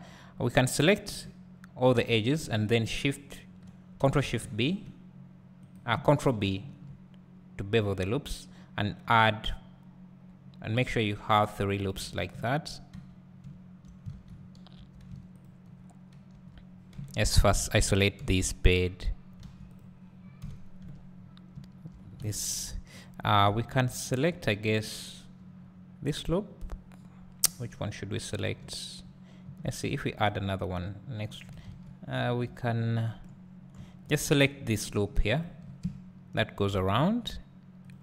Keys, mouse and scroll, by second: 4.5 ctrl+shift+b, 5.7 right click, 6.5 ctrl+b, 11.9 click, 12.1 Tab, 12.4 `, 13.4 `, 14.1 alt+a, 15.4 alt+click, 16.4 Tab, 17.4 KP_Divide, 17.8-18.2 scroll up 1, 18.2 KP_Divide, 19.4 alt+a, 19.8 click, 20.4 KP_Divide, 20.9 Tab, 21.1-21.5 scroll up 1, 23.0 alt+shift+click, 29.9 ctrl+r, 31.5 right click, 31.7 ctrl+z, 32.2 1, 32.8 scroll up 1, 33.5-34.1 scroll down 1, 34.1 alt+click, 35.8 `, 37.9 alt+shift+click.